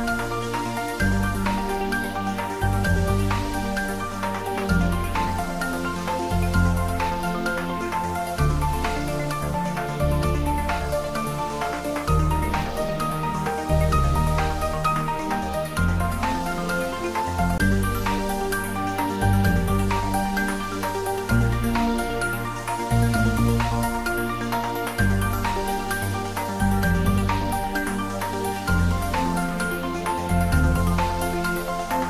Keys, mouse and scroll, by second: 10.6 click, 15.3 click, 15.5 click, 18.6-20.3 scroll up 1, 21.8-25.7 scroll up 1, 25.9-26.5 scroll up 1, 26.5 Tab, 29.2 s.